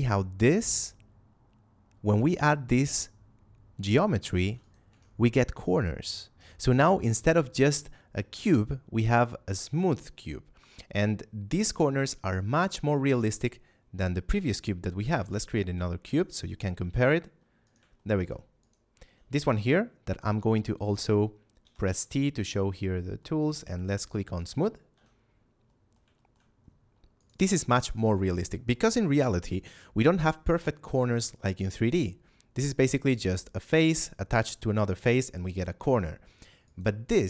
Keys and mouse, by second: 4.5 click, 4.8 Tab, 14.2 right click, 15.0 shift+a, 16.0 click, 16.7 g, 16.8 x, 17.6 click, 17.9 shift+middle click, 18.5 right click, 19.4 t, 23.1 middle click, 24.3 click, 24.8 a, 25.6 middle click, 26.0 shift+middle click, 27.1 right click, 28.2 shift+middle click, 30.1 right click, 36.6 right click.